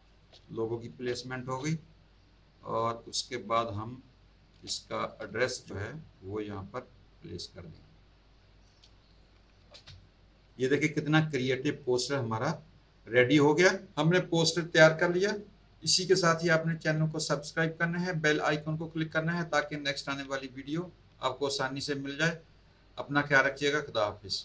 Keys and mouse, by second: 1.0 space, 1.1 click, 3.7 click, 4.6 space, 4.7 click, 5.8 click, 9.1 click, 9.6 z, 9.9 space, 10.0 click.